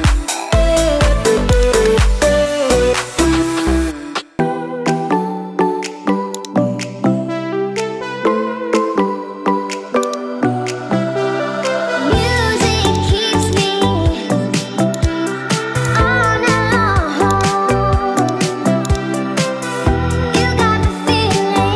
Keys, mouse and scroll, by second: 1.5 click, 2.3 g.